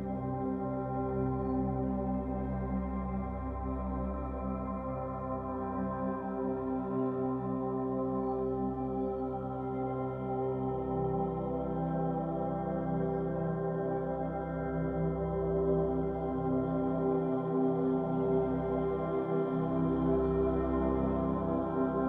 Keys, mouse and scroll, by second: 0.6 1, 0.8 click, 1.4 b, 1.8 e, 3.9 z, 4.0 middle click, 4.5 scroll down 2, 4.7 middle click, 5.2 scroll down 1, 5.5 middle click, 6.0 scroll up 4, 6.7 2, 7.2 click, 7.5 shift+click, 7.7 middle click, 8.0 g, 8.7 g, 10.0-11.4 middle drag, 11.4 l, 11.9 g, 12.9-15.1 middle drag, 15.1 shift+x, 16.0 middle click, 16.4 ctrl+z, 17.6 alt+n, 18.4 middle click, 18.6 scroll up 1, 18.7 Tab, 18.8-19.8 scroll down 9, 19.0 middle click, 19.8 middle click, 20.7 scroll up 7, 20.9 Tab, 21.2 middle click, 21.4 1, 21.9 click.